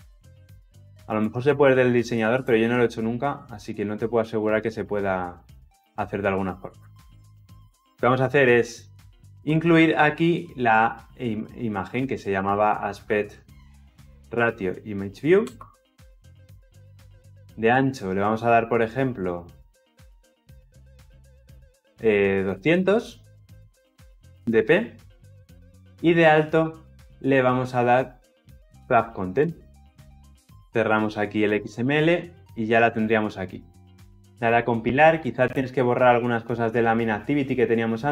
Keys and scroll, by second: 15.4 Return, 23.5 Return, 29.2 Return, 34.2 ctrl+F9.